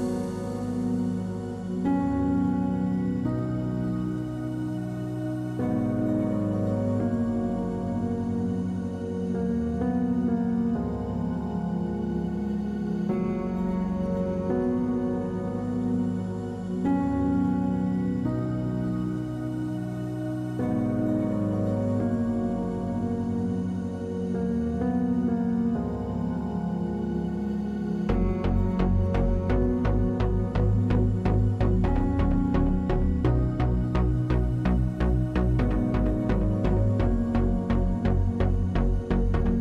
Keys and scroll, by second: 37.8 w.